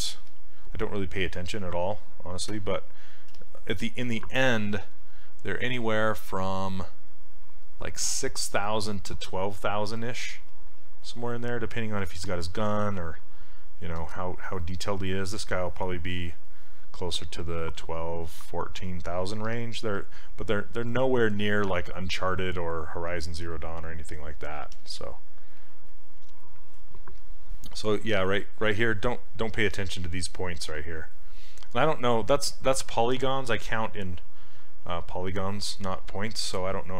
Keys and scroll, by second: 0.2 s, 2.5 q, 3.3 s, 23.5 s, 24.8 s.